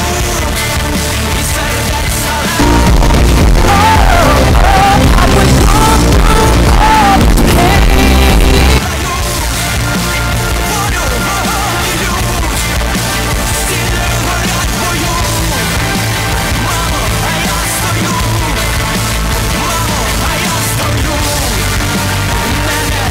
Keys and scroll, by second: 8.9 Page_Down.